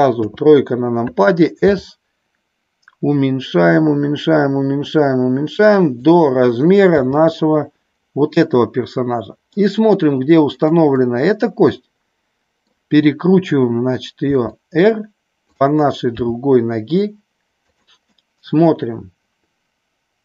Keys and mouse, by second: 0.1 KP_3, 1.7 s, 6.9 g, 10.5 click, 10.9-12.6 middle drag, 14.3 r, 15.5 click, 16.1 g, 17.5 click, 18.0-20.2 middle drag.